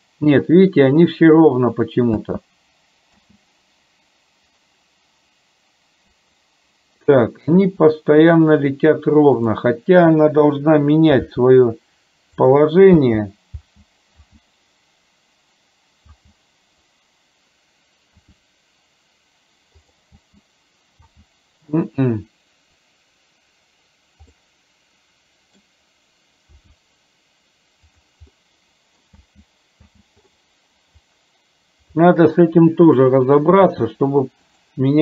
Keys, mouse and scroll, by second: 2.3 space, 3.3 space, 9.5 click, 11.4 r, 12.9 space, 13.7 space, 14.2 space, 16.2 space, 18.3 r, 20.1 space, 21.2 space, 24.5-25.6 middle drag, 26.6 r, 28.4 middle click, 29.2 space, 29.9 space, 32.1-33.2 middle drag, 33.8 r.